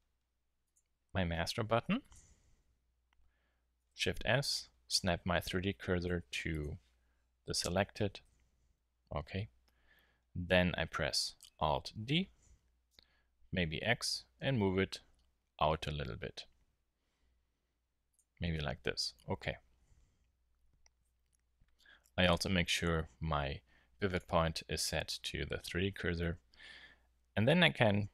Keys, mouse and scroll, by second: 2.5 z, 3.8 shift+s, 8.2 KP_7, 8.9 z, 12.0 alt+d, 18.1 click, 18.3 z, 22.2-24.0 drag.